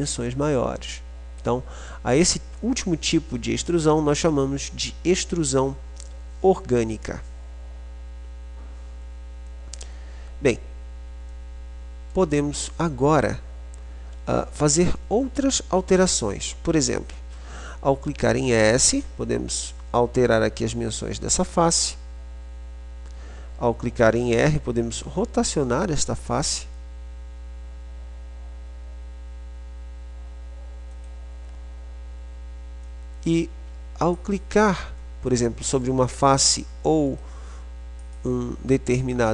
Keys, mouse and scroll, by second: 1.8 middle click, 2.1-4.8 drag, 4.8-11.3 middle drag, 18.1-19.1 middle drag, 19.1-21.4 drag, 19.1 s, 21.6-23.4 drag, 23.4-24.4 middle drag, 24.4 r, 32.9-34.4 shift+scroll, 34.4-38.3 drag, 38.3-38.9 scroll.